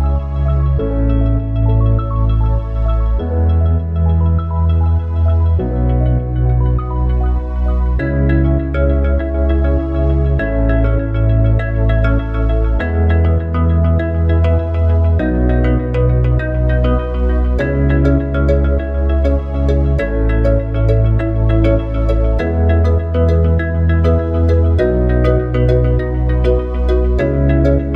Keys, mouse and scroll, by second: 2.5 ctrl+r, 7.5 ctrl+r, 11.1 ctrl+r, 19.9 ctrl+r.